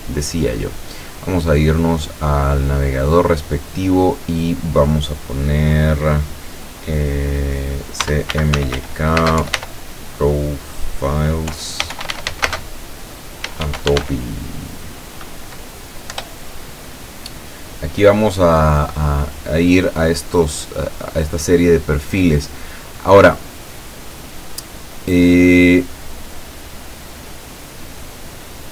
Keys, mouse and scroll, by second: 7.8-14.5 typing, 16.2 Return, 20.9-21.4 scroll down 2, 21.6 scroll up 2, 27.6 click.